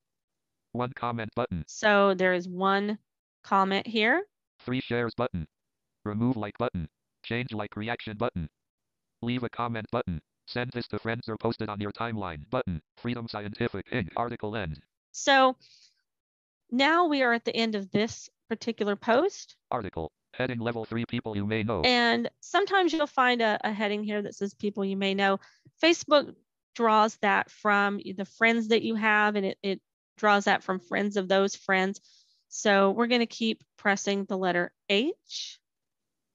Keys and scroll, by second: 34.8 h.